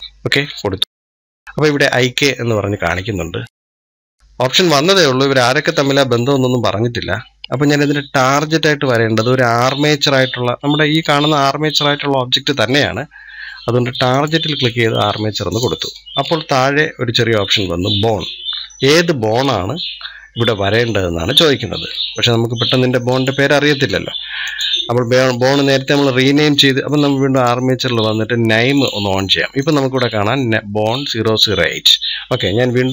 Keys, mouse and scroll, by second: 6.1 scroll up 2, 14.0-26.8 drag, 27.1 click, 28.5 click, 29.4-32.5 drag.